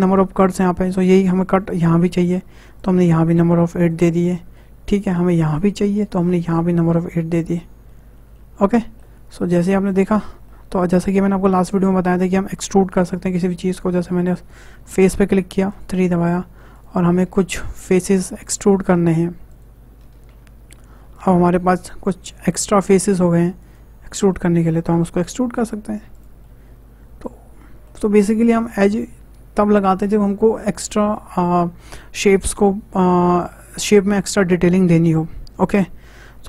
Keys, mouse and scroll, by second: 1.7-4.6 drag, 4.6-5.6 middle drag, 5.6-7.9 drag, 7.9-9.6 middle drag, 9.6 click, 10.2 scroll down 2, 10.5 middle click, 11.4-13.4 scroll up 2, 13.4-14.1 scroll up 1, 14.1 click, 15.7 click, 16.8 ctrl+click, 19.5 shift+click, 21.2 ctrl+click, 23.6 ctrl+click, 24.3-25.3 middle drag, 25.3 e, 26.4-30.6 middle drag.